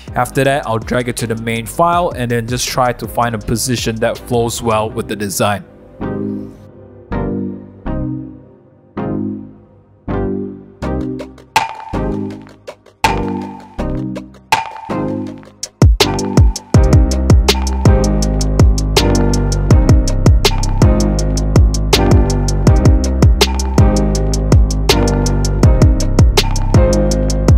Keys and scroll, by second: 0.5-2.3 typing, 7.0 super+z, 7.1 super+z, 8.5 super+z, 8.6 super+z, 8.6 super+=, 10.8 w, 12.4-13.3 typing, 14.6 typing, 19.5 super+a, 19.5 super+c, 19.5 super+d, 19.8 super+v, 20.1 super+t, 21.1 Return, 21.6 super+0, 21.6 super+-, 22.2 super+0, 22.6 super+t, 23.0 Return, 23.2 super+t, 26.9 Return, 27.0 super+0, 27.0 super+-, 27.2 super+-, 27.2 super+1.